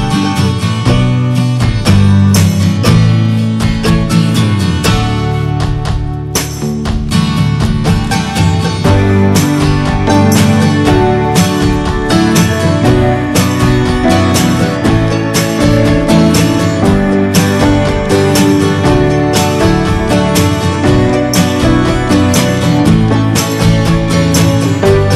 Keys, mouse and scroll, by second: 0.0 middle click, 0.5 scroll up 1, 0.9 x, 1.4 Tab, 1.8 scroll down 1, 2.0 middle click, 2.2 Tab, 2.5 scroll down 1, 2.7 shift+middle click, 2.9 shift+scroll up 1, 3.2 middle click, 3.6 Tab, 3.7 scroll down 2, 3.9 shift+middle click, 4.1 scroll up 1, 4.3 click, 4.6 Tab, 4.8 middle click, 5.0-5.3 scroll up 2, 5.1 shift+middle click, 5.6 shift+middle click, 6.1 scroll up 1, 6.6 click, 7.1 click, 9.0 alt+shift+click, 9.4 alt+shift+click, 10.0 scroll down 2, 10.2 middle click, 10.6-11.1 scroll up 3, 10.8 shift+middle click, 11.2 scroll down 1, 11.4 scroll up 2, 12.0 alt+shift+click, 12.3 alt+shift+click, 13.0 alt+shift+click, 13.2-14.5 middle drag, 14.5 alt+shift+click, 14.8 alt+shift+click, 15.4 alt+shift+click, 15.9 middle click, 16.5 x, 16.7 Tab, 16.8 drag, 17.0 scroll down 2, 17.2 middle drag, 17.4 scroll up 1, 17.6 click, 17.9 ctrl+a, 18.1-18.9 shift+middle drag, 18.9 scroll down 1, 19.1 shift+middle click, 19.3-20.3 shift+scroll up 1, 20.3 click, 20.5 click, 20.7 shift+middle click, 20.8 scroll up 1, 21.0-21.8 middle drag, 21.8 ctrl+s, 23.3-24.6 drag, 24.8 middle drag, 25.0 click.